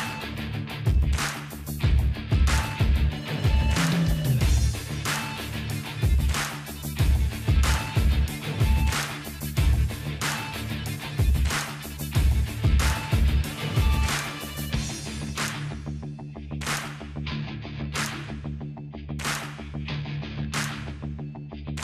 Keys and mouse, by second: 0.0 ctrl+r, 3.3-7.7 drag, 7.3 alt+g, 7.9 ctrl+z, 8.5 alt+h, 9.5 Tab, 9.6-13.4 middle drag, 13.4-16.5 drag, 16.5 middle click, 16.9 click, 17.0 right click, 19.4-20.5 drag, 19.4-20.5 right drag, 20.3 ctrl+r, 20.5 middle click.